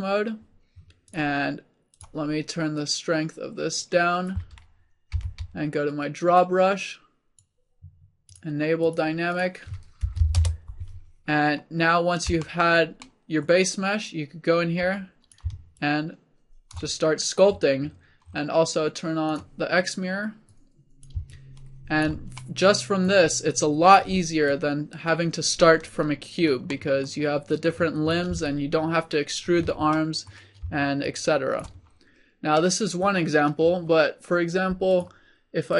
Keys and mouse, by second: 5.2 d, 11.6 middle click, 15.8-21.3 drag.